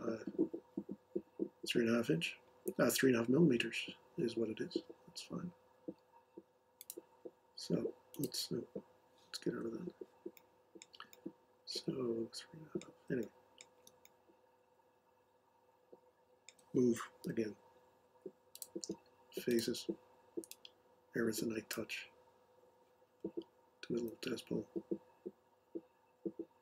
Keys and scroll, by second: 9.4 Escape, 17.2 m.